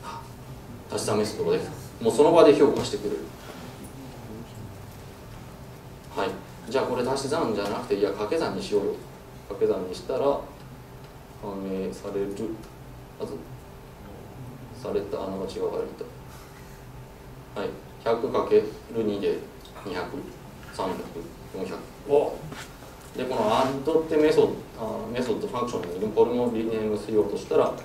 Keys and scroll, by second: 10.5 super+F9, 11.5 super+s, 15.0 super+z, 15.7 ctrl+Right.